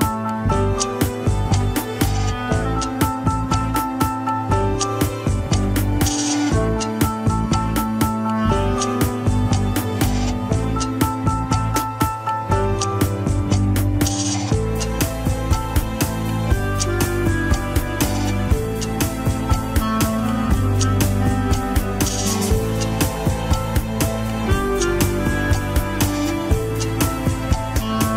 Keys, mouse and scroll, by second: 1.2 click, 1.9 middle click, 2.2 scroll up 1, 2.5 click, 3.5 middle click, 4.0 scroll up 1, 4.5 click, 5.3 middle click, 6.2-8.3 drag, 8.3 alt+z, 8.6 middle click, 9.1 KP_1, 9.3 scroll up 1, 10.6 ctrl+click, 10.6 alt+z, 11.1 scroll down 2, 11.9-14.1 drag, 14.1 scroll down 1, 15.0 ctrl+Tab, 15.5 alt+z, 16.3 click, 17.4 ctrl+Tab, 17.6-19.3 middle drag, 19.3 a, 19.6 alt+r, 20.0 alt+g, 20.0 KP_1, 20.4 scroll up 1, 21.8 click, 22.6-23.1 scroll up 2, 23.1 r, 26.5 alt+z, 27.0 click, 27.5 alt+z, 27.9 g.